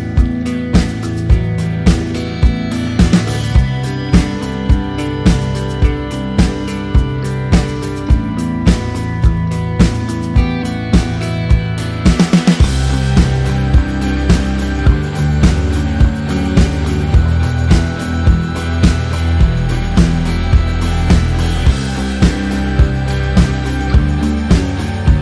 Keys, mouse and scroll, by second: 0.8 Return, 2.3 click, 4.3 click, 8.6 Return, 9.3 click, 14.0 t, 14.7 click, 15.7 Return, 16.0 click, 22.9 click, 23.2 click.